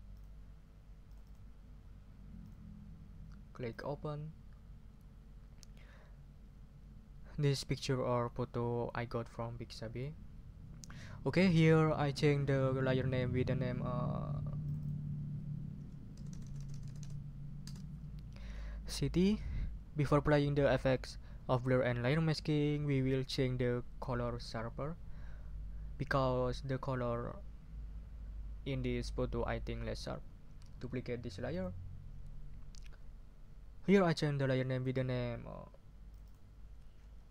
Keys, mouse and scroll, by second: 0.1 click, 1.1 click, 2.4 click, 3.7 click, 14.6 click, 15.7 Right, 16.2 BackSpace, 17.6 Return, 31.5 click, 36.1 click, 37.2 Right.